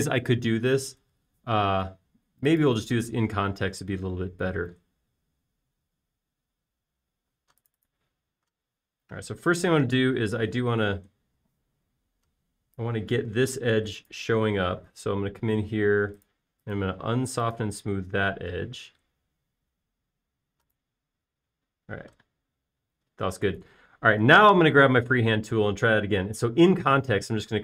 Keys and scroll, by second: 2.0 super+z, 4.2 space, 19.2 space.